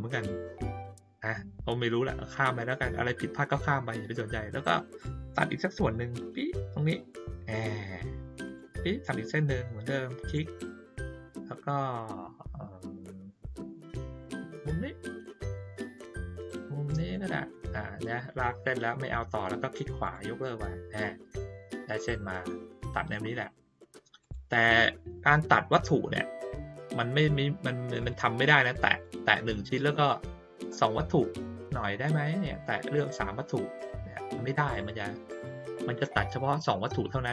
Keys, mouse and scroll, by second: 8.4 click, 10.2 click, 14.5 click, 20.0 right click, 24.2 click, 28.0 click, 28.8 click, 32.4 shift+click, 34.7 click.